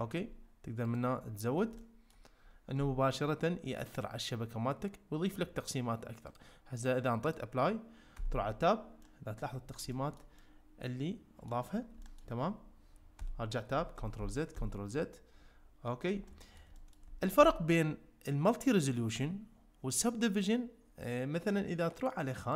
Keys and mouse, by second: 1.0 click, 1.8 ctrl+middle click, 6.4-7.4 drag, 8.2 Tab, 9.0 middle click, 9.9 shift+middle click, 10.4-11.5 middle drag, 12.0 shift+middle click, 13.2 Tab, 14.0 ctrl+z, 14.2 ctrl+z, 16.3 middle click, 16.7 middle click.